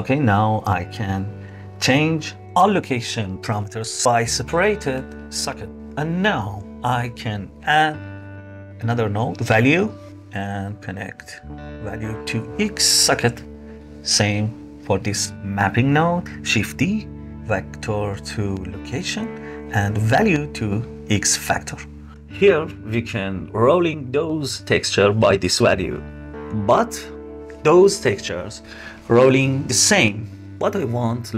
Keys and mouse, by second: 1.9-3.5 drag, 4.0-6.0 drag, 7.5 shift+a, 10.9-12.2 drag, 12.7 click, 14.0 click, 16.8 shift+d, 17.2-19.0 drag, 19.4 click, 20.1-22.1 drag, 22.9-26.4 shift+drag, 28.2 click, 30.6 shift+a.